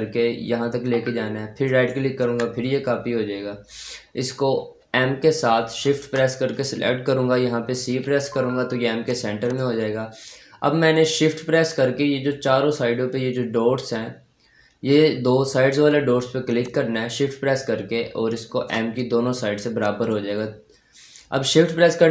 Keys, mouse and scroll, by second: 1.5 ctrl+right click, 2.6-3.1 scroll down 1, 3.1-4.7 scroll up 1, 5.7 shift+click, 7.8 c, 8.9 click, 11.2-11.8 scroll down 1, 11.8 scroll up 1, 15.8-16.5 scroll up 1, 16.5-19.3 shift+drag, 19.3-19.6 scroll down 1, 20.4 click.